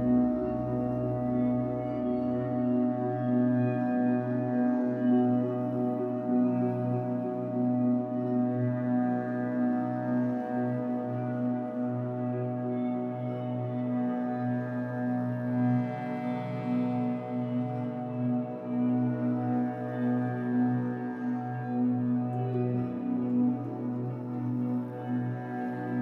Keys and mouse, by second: 0.4-3.6 typing, 0.7 ctrl+alt+click, 1.4 alt+click, 3.9 click, 4.4 alt+click, 7.2 click, 7.8 click, 8.7-9.4 typing, 8.9 click, 10.1 click, 11.3 click, 13.9 click, 14.8 KP_3, 15.0 KP_0, 15.2 KP_0, 15.3 Return, 17.7 click, 19.2 click, 19.9 click, 20.7 click, 21.6 click, 25.3-26.0 typing.